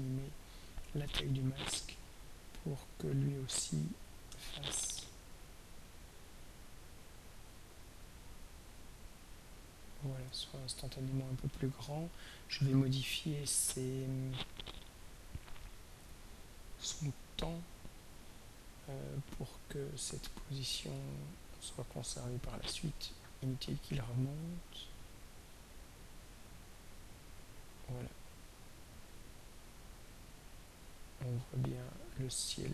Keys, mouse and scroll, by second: 1.6-3.3 drag, 4.5-6.7 shift+drag, 8.7 shift+click, 21.0 click, 24.4 right click, 25.6 drag, 26.9-32.7 drag.